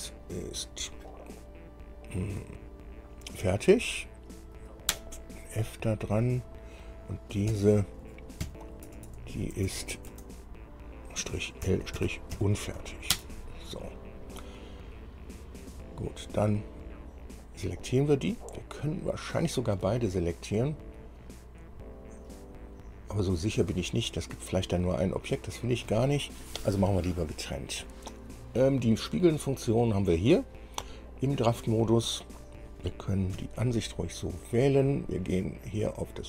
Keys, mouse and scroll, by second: 3.6 shift+f, 5.1 Return, 6.6 click, 7.7 F2, 8.6 Right, 9.1 BackSpace, 9.8 BackSpace, 10.0 BackSpace, 10.3 BackSpace, 11.8 l, 12.2 -, 12.6 u, 13.3 Return, 16.5 click, 19.1 shift+click, 25.2 click, 32.7 click, 33.6 KP_1.